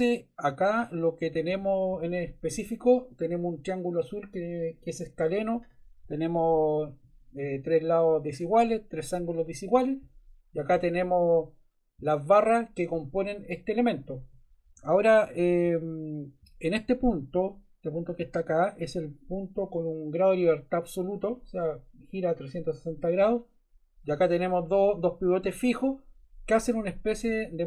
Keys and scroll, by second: 1.5 Left, 14.7 Right, 15.6 Left, 27.3 Right.